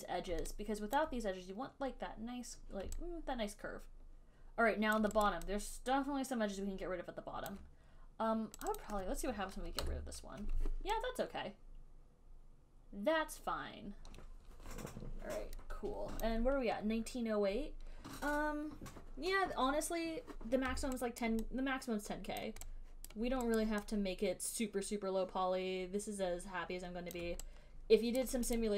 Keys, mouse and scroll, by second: 1.3 alt+click, 5.6 alt+click, 5.6 alt+right click, 7.7 alt+click, 9.0 click, 9.1 click, 10.1 ctrl+Delete, 16.5 alt+click, 21.4 alt+right click, 22.7 alt+right click, 23.4 alt+click, 23.4 alt+right click, 23.9 alt+right click, 25.9 alt+click, 27.4 alt+right click, 27.4 alt+click, 28.5 right click.